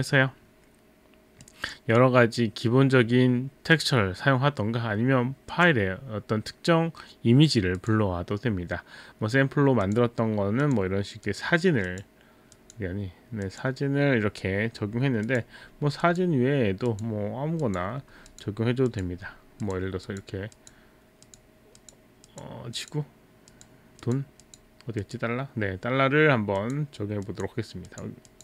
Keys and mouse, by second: 1.5 click, 5.5 click, 7.8 click, 9.9 click, 10.7 click, 11.3 click, 11.9 click, 12.5 click, 15.2 click, 16.0 click, 16.9 click, 17.7 click, 18.3 click, 18.9 click, 19.6 click, 20.1 click, 20.6 click, 21.3 click, 21.8 click, 22.8 click, 23.6 click, 24.0 click, 25.0 click, 26.6 click, 27.3 click, 27.9 click, 28.3 click.